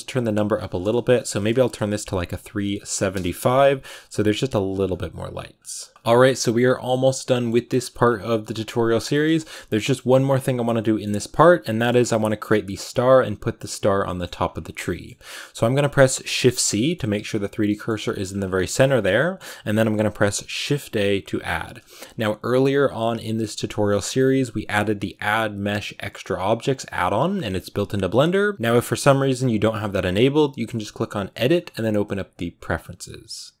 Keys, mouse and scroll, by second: 3.0 BackSpace, 5.9-6.9 scroll up 1, 6.9-7.9 middle drag, 7.9-8.3 scroll down 2, 8.3-11.8 middle drag, 11.8-12.1 scroll up 4, 12.1-14.2 middle drag, 14.2-14.7 scroll down 2, 14.7-16.1 middle drag, 16.1 shift+c, 16.6 middle click, 17.0 shift+c, 17.5 middle click, 18.1-18.7 scroll up 3, 18.7-33.6 shift+middle drag.